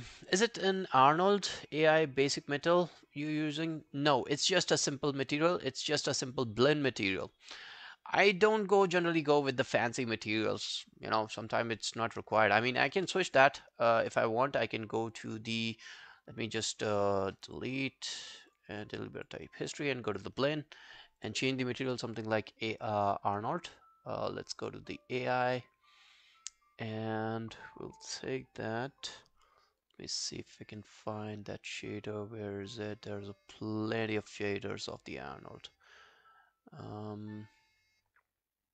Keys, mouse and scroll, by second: 5.3 right click, 12.4-12.9 scroll down 2, 16.4 right click, 18.5 double click, 18.8 double click, 23.2-23.6 scroll down 1, 23.6-24.0 scroll up 1, 25.6 scroll up 5, 25.7-28.7 scroll down 1, 30.0-30.8 scroll up 5, 30.8-34.2 scroll down 2.